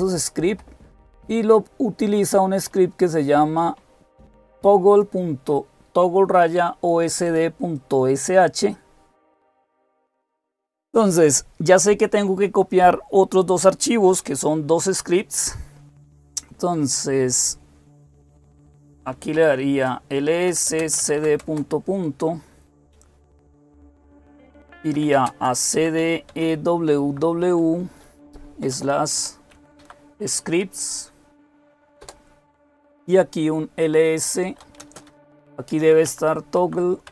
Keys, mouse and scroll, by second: 1.8-5.5 drag, 7.0-18.9 drag, 18.9-21.4 typing, 19.5 Return, 24.5-26.8 typing, 28.4-29.6 typing, 31.8 typing, 34.0-37.1 typing.